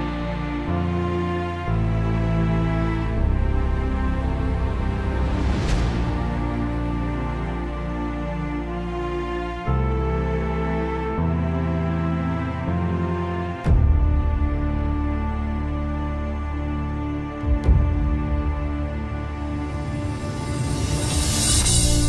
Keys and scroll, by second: 7.0 ctrl+z, 19.1-20.6 typing.